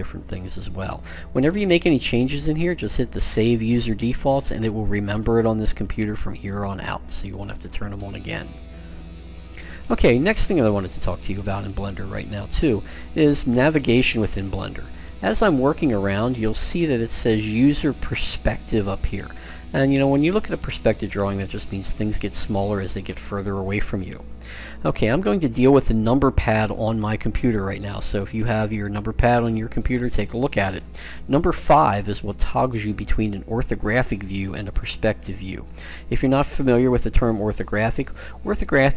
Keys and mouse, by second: 11.1-15.3 middle drag, 19.4-24.4 middle drag, 32.0 KP_5, 34.3 KP_5, 35.5 KP_5, 36.4 KP_5, 37.2 KP_5.